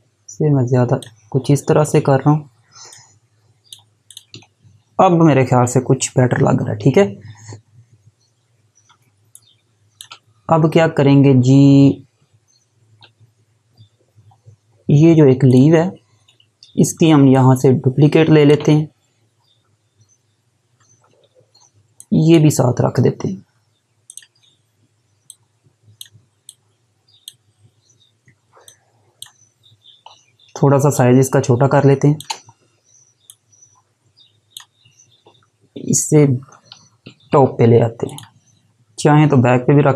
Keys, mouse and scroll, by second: 7.6-7.9 scroll down 1, 8.4 alt+scroll down 1, 9.0 space, 9.5 space, 14.2 scroll up 1, 15.5 click, 17.3 click, 21.1-21.9 scroll up 1, 21.9 click, 30.9 shift+click, 33.3 click, 38.0 click.